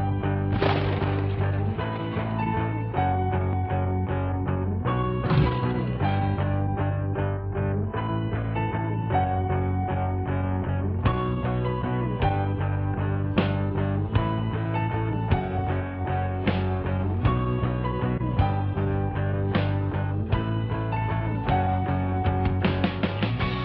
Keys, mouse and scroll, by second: 1.1 scroll up 1, 4.0-5.0 drag, 6.6 scroll down 1, 7.2 scroll up 1, 11.1-12.2 drag, 14.4 right click, 15.4 click, 17.4 click.